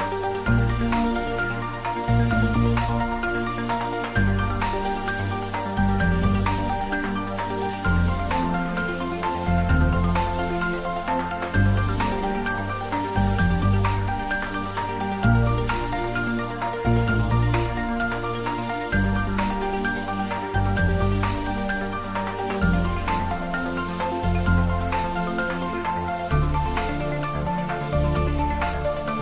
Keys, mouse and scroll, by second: 0.8 shift+middle click, 1.2 Tab, 1.3 middle click, 1.9 ctrl+e, 2.4 click, 5.9 click, 8.6 click, 9.4 ctrl+middle click, 10.8 click, 12.8 click, 14.7 ctrl+e, 15.1 click, 18.1 click, 18.8 ctrl+middle click, 19.0 ctrl+middle click, 19.1 ctrl+z, 21.0 Tab, 22.2 click, 24.5 click.